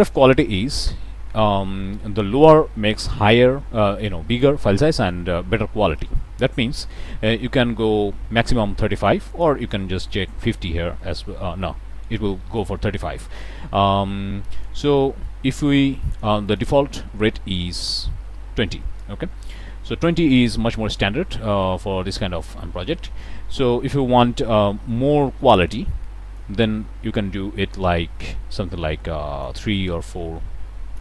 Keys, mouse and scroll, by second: 7.2-9.6 drag, 10.0 5, 10.1 0, 10.4 Return, 12.5 click, 14.5-16.3 drag, 16.4 right click, 17.8 click, 26.3-29.6 drag, 29.8-31.0 drag.